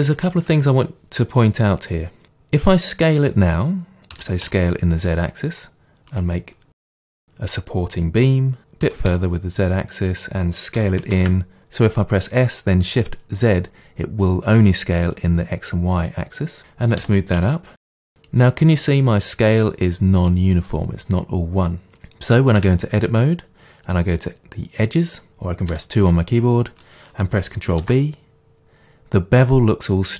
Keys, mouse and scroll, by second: 4.2 s, 6.2 click, 6.6 scroll down 2, 6.8-10.2 middle drag, 8.9 s, 10.2 click, 10.8 s, 16.6 click, 17.0 g, 18.3 click, 22.6 Tab, 24.8 click, 25.7 2, 26.9 middle click, 27.8 ctrl+b.